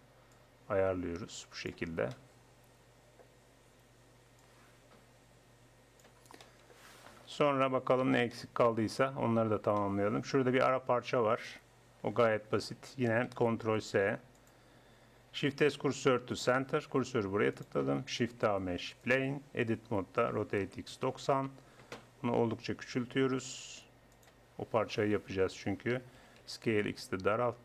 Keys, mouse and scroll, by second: 0.4-2.1 drag, 2.1 middle click, 2.5-4.4 middle drag, 4.4-6.4 drag, 6.4-7.4 middle drag, 7.4 KP_1, 13.6 ctrl+s, 15.5 shift+s, 18.2 shift+a, 19.5 Tab, 20.3 r, 22.1 scroll up 1, 22.2 middle click, 23.3 s, 26.2 s.